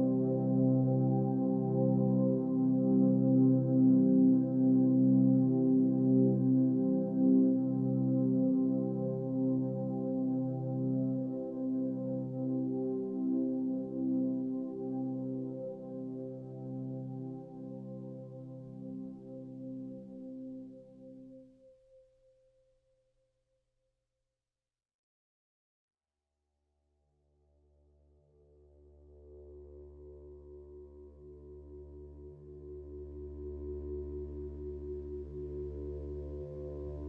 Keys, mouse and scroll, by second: 9.1 ctrl+space, 24.9 ctrl+space, 35.7 ctrl+space, 36.5 click.